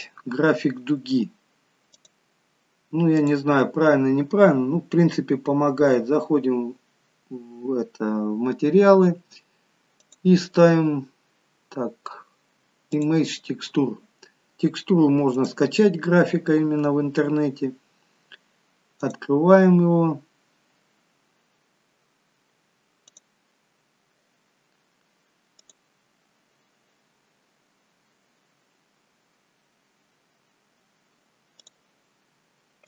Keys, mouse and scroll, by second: 2.0 click, 3.2 click, 10.1 click, 20.7 click.